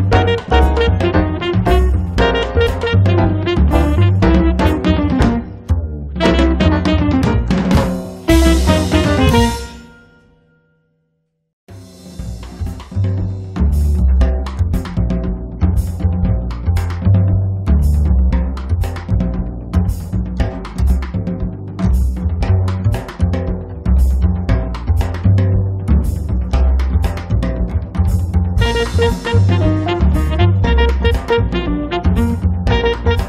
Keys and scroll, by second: 4.5 space, 7.4 Escape, 7.7 space, 8.2 Escape, 12.8 Escape, 13.1 space, 17.9 space, 18.3 Escape, 25.6 space, 26.1 Escape.